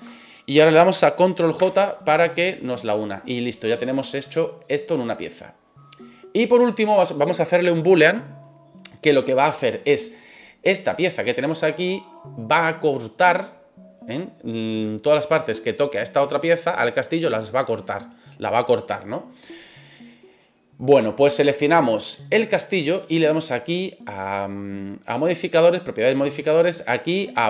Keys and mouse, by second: 1.5 ctrl+j, 3.9-4.2 middle drag, 5.0 middle click, 5.7 right click, 10.8 right click, 14.3-14.9 middle drag, 16.4-17.8 middle drag, 22.1 right click, 26.2-27.4 drag.